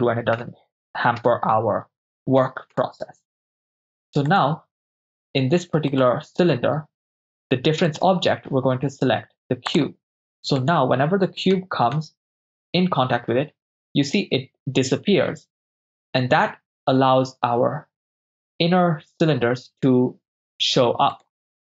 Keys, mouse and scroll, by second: 1.3 KP_0, 2.8 KP_0, 4.4 click, 4.4 right click, 5.9 click, 7.9 click, 10.6 click, 10.6 right click, 11.6 g, 11.9 z, 21.1 right click.